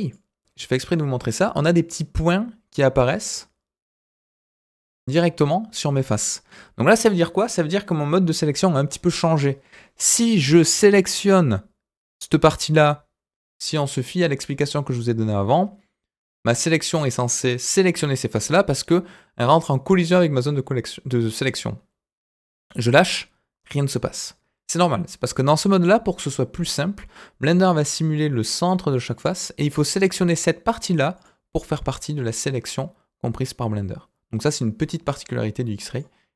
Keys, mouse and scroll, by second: 0.0 click, 10.3-23.2 drag, 29.7 click, 31.1 click, 32.5-36.0 drag.